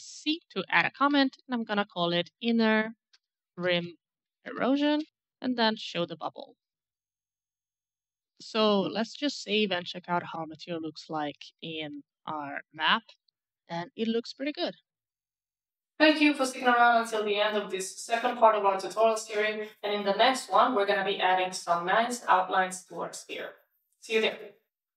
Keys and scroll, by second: 0.4-4.4 typing, 6.7 BackSpace, 6.8 Return, 10.0-14.2 typing.